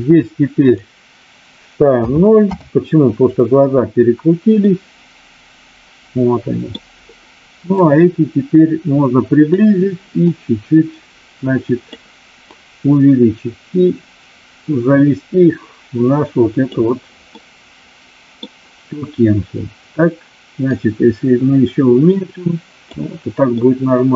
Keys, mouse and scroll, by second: 0.6-2.6 drag, 4.7-6.7 middle drag, 7.7-9.4 drag, 10.1-11.8 drag, 12.3-16.7 drag, 17.4-18.4 middle drag, 20.7-23.0 drag, 23.6-24.1 middle drag.